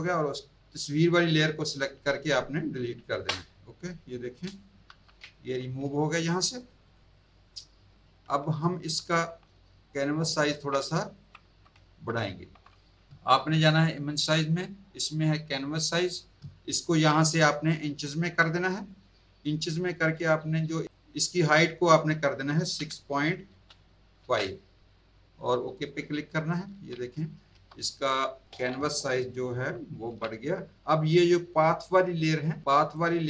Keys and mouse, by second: 1.0 click, 3.1 Delete, 4.9 ctrl+d, 5.6 z, 6.1 alt+click, 6.3 alt+click, 6.6 alt+click, 7.5 alt+click, 9.9 super+click, 11.1 alt+click, 13.9 click, 15.6 click, 17.7 click, 18.7 click, 20.8 click, 22.8 KP_6, 23.5 KP_Decimal, 24.2 KP_5, 25.7 click, 27.2 z, 28.0 alt+click, 28.4 click, 30.8 click, 31.1 click, 31.9 shift+click, 32.9 click.